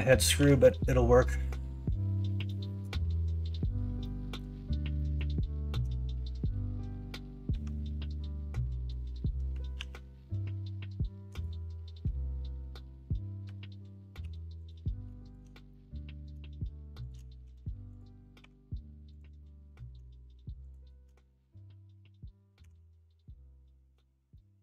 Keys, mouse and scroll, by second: 0.3 k, 4.0 middle click, 4.9 middle click, 9.7 ctrl+r, 14.2 3, 15.7 middle click, 17.4 x, 18.4 2, 19.4 middle click, 22.6 f, 23.2 middle click, 24.3-24.6 middle drag.